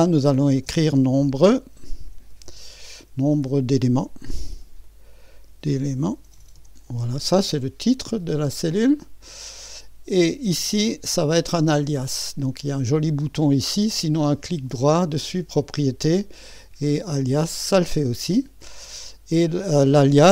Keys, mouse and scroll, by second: 0.3-3.4 typing, 4.5-7.4 typing, 8.3 click, 10.5 click, 14.5 right click, 14.8 click, 16.2 click, 17.4 click, 18.4 click.